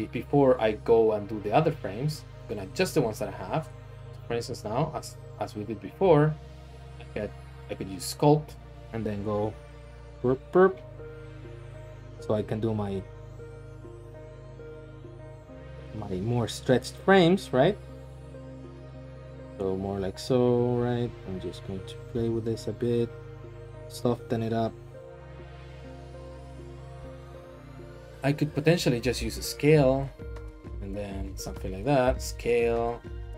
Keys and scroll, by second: 4.2 Tab, 4.7 Tab, 6.1 ctrl+Tab, 28.4 Tab, 29.0 typing, 31.1-33.3 typing.